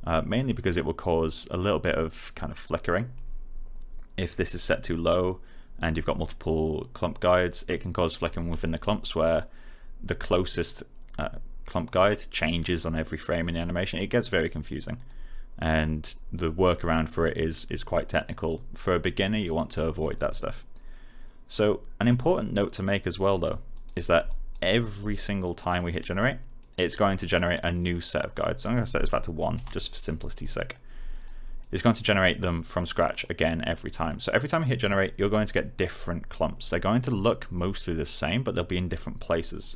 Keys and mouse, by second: 15.0 click, 23.7 click, 24.6 right click, 25.8 click, 28.9 1, 29.5 Return, 30.3 click, 39.5 click.